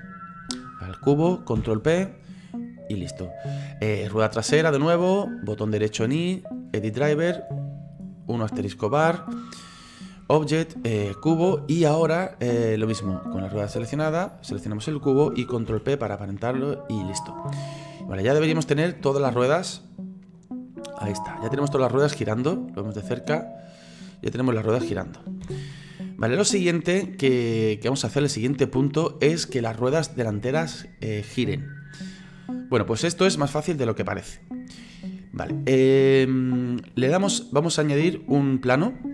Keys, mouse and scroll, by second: 1.6 ctrl+p, 3.9 right click, 5.6-14.4 right drag, 15.7 ctrl+p, 17.5-19.1 middle drag, 19.1 right click, 19.5-20.3 scroll down 3, 20.3-22.2 drag, 22.2-23.0 scroll up 3, 23.0-25.4 drag, 25.4 ctrl+z, 26.0-36.8 middle drag.